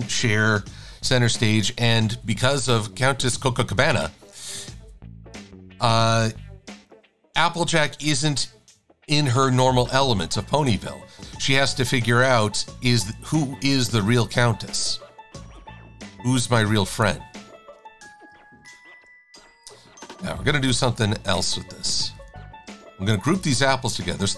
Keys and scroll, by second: 1.0 super+-, 1.3 super+-, 1.4 super+-, 2.5 shift+super+a, 6.8 i, 20.1 v, 23.5 super+g.